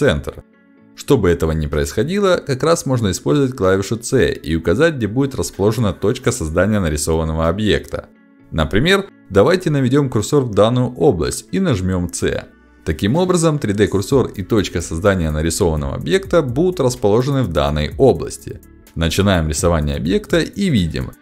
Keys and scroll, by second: 0.9 space, 8.4 Escape, 10.3 c.